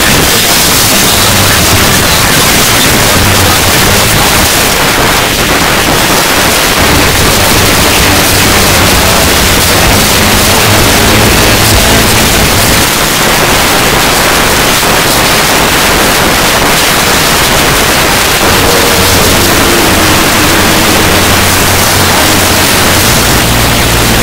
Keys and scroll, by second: 4.5 Page_Down, 12.8 Page_Down.